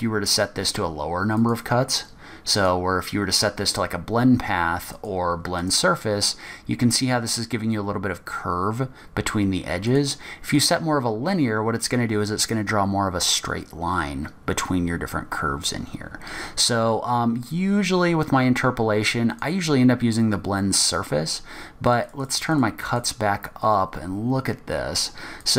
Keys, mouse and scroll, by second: 1.5 click, 5.1 click, 10.0 click, 17.5-18.0 scroll down 3, 18.1-18.7 scroll up 2, 19.5-22.4 click, 22.0 click, 22.2 click, 22.5 click, 23.0 click, 23.0 click, 23.9 scroll down 2, 24.1-24.5 scroll up 1.